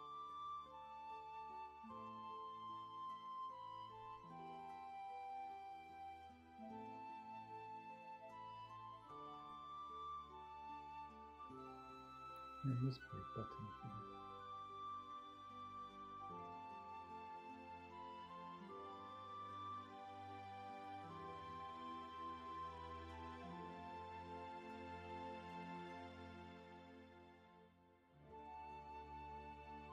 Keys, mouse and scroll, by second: 4.7 ctrl+z, 20.5 ctrl+z, 21.1 space, 25.0 ctrl+z, 25.4 shift+space.